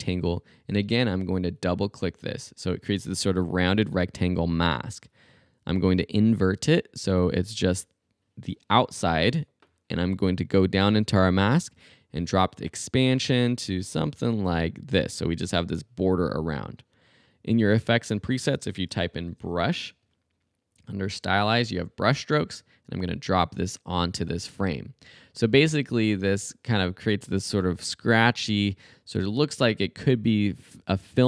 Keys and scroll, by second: 18.3 super+a, 18.8 super+b, 18.8-19.9 typing.